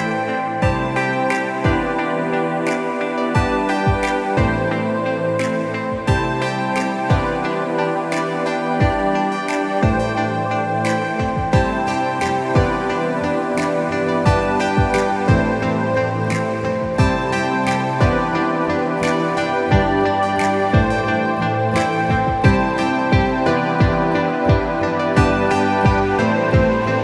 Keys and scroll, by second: 1.3 space, 3.1 space, 6.8 ctrl+z, 8.4 ctrl+alt+z, 9.2 ctrl+alt+z, 9.8 ctrl+Return, 9.9 ctrl+Delete, 10.1 ctrl+d, 12.6 ctrl+alt+z, 12.8 ctrl+Return, 13.0 ctrl+Delete, 13.1 ctrl+d, 14.0 space, 16.9 space, 21.8 space, 23.0 space, 24.1 ctrl+a, 24.2 ctrl+c, 24.4 ctrl+w, 25.1 ctrl+v, 25.7 ctrl+alt+shift+t.